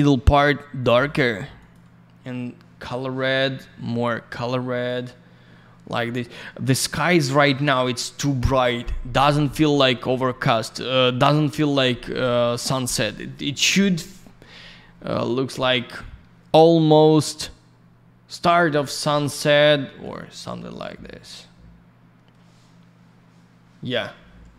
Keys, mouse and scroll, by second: 0.8 click, 1.5 click, 1.7 click, 4.3 click, 9.3-9.7 scroll down 1, 9.7 middle click, 10.2 middle click, 11.8-12.2 scroll up 1, 12.2 middle click, 13.1-13.6 scroll up 1, 13.6 click, 13.7 click, 13.7 click, 13.9 double click, 16.8 click, 20.0 click.